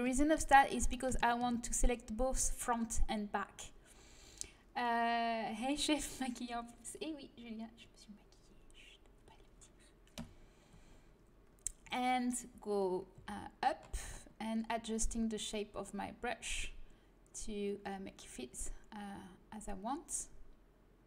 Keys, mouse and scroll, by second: 10.2 KP_1, 13.1 g.